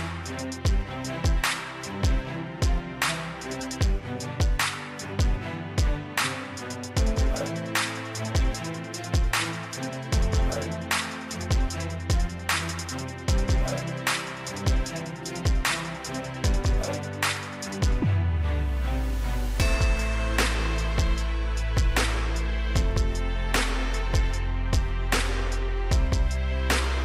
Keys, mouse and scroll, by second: 0.1-0.8 scroll down 1, 0.8-11.2 drag, 13.6 right click, 14.5 click, 15.6 right click, 17.4 click, 19.3-23.4 scroll up 1, 23.4 scroll down 1, 26.4-27.0 scroll up 1.